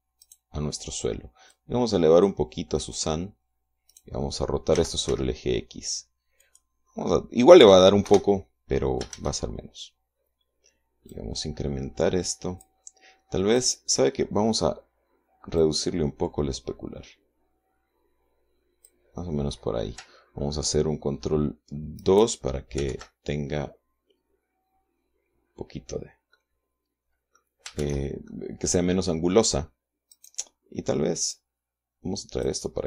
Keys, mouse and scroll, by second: 0.7 right click, 2.0-3.6 drag, 4.4 right click, 5.2 r, 5.6 x, 6.9 click, 7.5 middle click, 8.6 KP_0, 9.6 shift+z, 11.6-13.3 drag, 14.1 right click, 16.1-19.6 drag, 22.5 ctrl+right click, 23.4 ctrl+2, 26.8-28.0 middle drag, 28.3 shift+z, 28.8 shift+middle click, 30.6 right click, 31.8-32.8 drag.